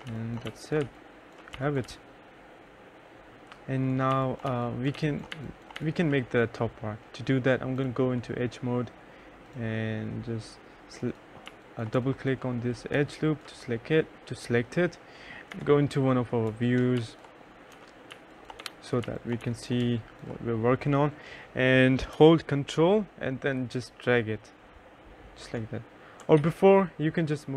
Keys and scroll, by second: 0.0-1.2 typing, 3.2-5.6 typing, 10.8 2, 11.3 3, 14.9 F2, 15.8 F3, 16.3-19.7 typing, 17.1 F4, 25.8 ctrl+z.